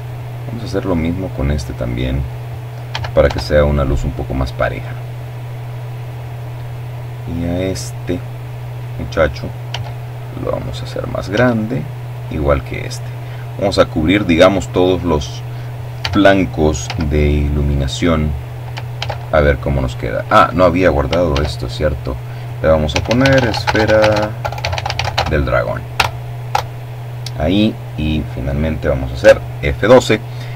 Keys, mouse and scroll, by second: 0.5 s, 0.8 y, 1.8 click, 4.9 right click, 5.7-7.2 drag, 7.3 s, 8.0-9.0 drag, 8.4 right click, 8.9 s, 9.7 click, 12.1 right click, 13.6 s, 14.4 z, 15.2 click, 16.6 ctrl+s, 17.9 Escape, 18.9 ctrl+s, 19.8 click, 20.5-22.7 typing, 23.6 Return, 26.7 F12.